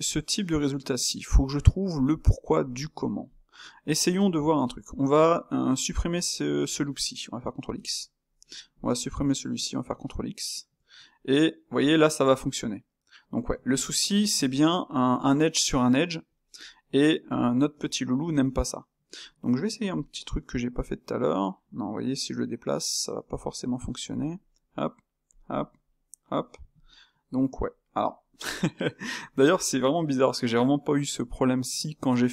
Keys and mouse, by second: 4.6 click, 5.2 Tab, 5.9 alt+click, 7.7 ctrl+x, 8.7 alt+click, 9.8 ctrl+x, 10.8 Tab, 11.2-13.9 middle drag, 13.9 ctrl+z, 14.3 ctrl+z, 15.1 ctrl+z, 16.5 Tab, 17.8 Tab, 18.3 Tab, 19.2 click, 19.5-20.7 middle drag, 20.7 g, 22.3-23.5 middle drag, 23.5 g, 24.5 g, 26.5-32.3 middle drag.